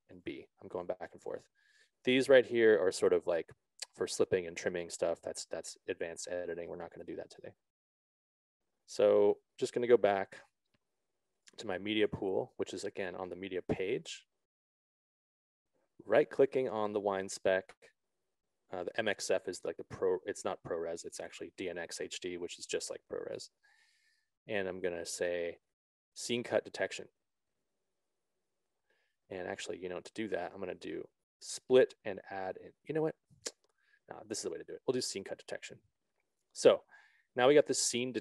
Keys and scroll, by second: 9.7 ctrl+z.